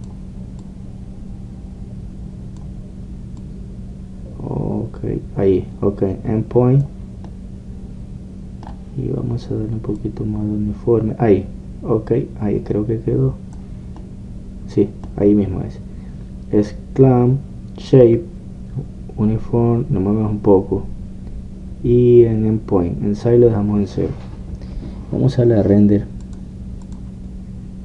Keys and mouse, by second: 1.7-3.6 drag, 4.5-8.3 drag, 8.3-10.9 middle drag, 11.1-16.3 drag, 16.3-18.3 middle drag, 27.3 click.